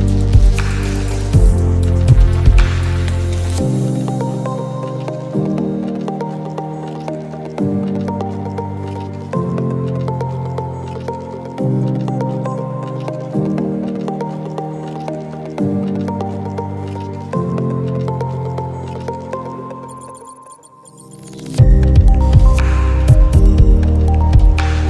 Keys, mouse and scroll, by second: 1.2-3.4 drag, 4.7 space, 4.8 click, 5.1 space, 9.0 click, 11.1 click, 13.1 click, 18.8 click, 20.7 click, 23.3 click.